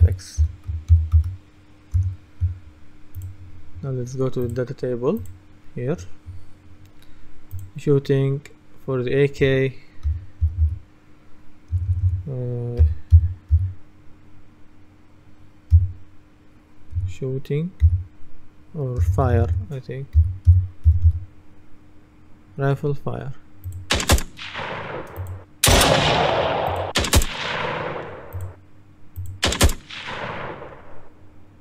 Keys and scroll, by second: 0.0-1.0 typing, 2.0 Return, 9.9-14.1 typing, 17.0-17.9 typing, 19.1 BackSpace, 20.2-21.6 typing.